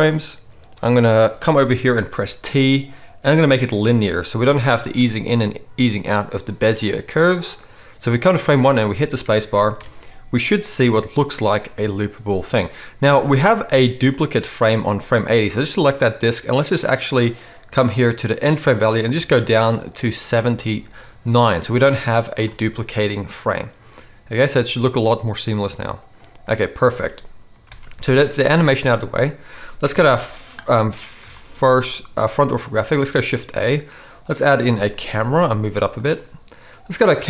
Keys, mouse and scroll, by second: 2.2 t, 8.6 space, 9.8 alt+a, 13.0 space, 15.6-19.3 middle drag, 19.3-35.9 drag, 22.4 space, 26.8 space, 27.6 n, 29.9 KP_1, 33.1 shift+a, 35.1 g, 35.9 middle click, 36.9 click, 37.0-37.2 middle drag.